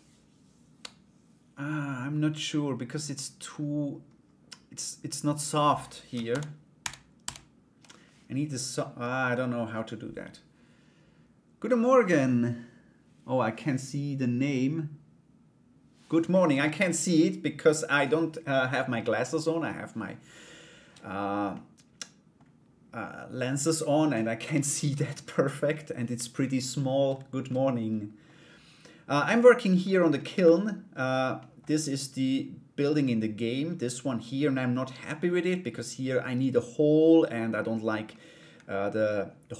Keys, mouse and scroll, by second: 5.9 ctrl+z, 21.1 click, 27.0 click, 31.0 middle click.